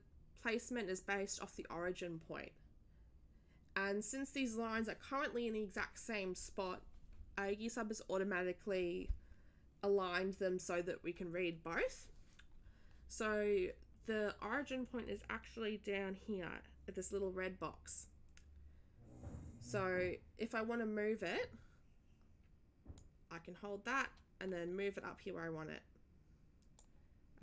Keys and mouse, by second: 22.9-26.9 drag.